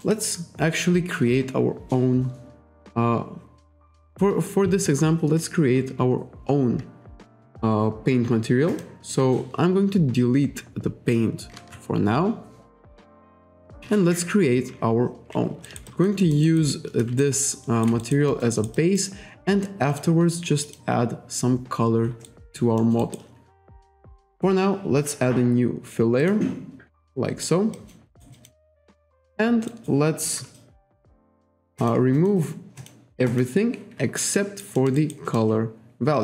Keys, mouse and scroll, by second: 3.9 click, 8.7 click, 11.5 Delete, 13.2 click, 13.8 Delete, 15.7 alt+right click, 15.9 alt+click, 16.2 alt+middle click, 16.5 alt+right click, 17.2 shift+right click, 18.0 alt+right click, 18.3 alt+middle click, 18.5 alt+right click, 18.8 alt+click, 19.9 click, 20.7 click, 22.3 alt+right click, 22.8 alt+middle click, 23.0 alt+right click, 26.2 click, 27.0 alt+right click, 27.8 alt+click, 28.1 alt+right click, 28.3 alt+click, 29.7 alt+right click, 31.8 click, 32.2 click, 32.8 click, 33.3 click, 34.3 alt+right click, 34.8 alt+middle click, 35.0 alt+right click.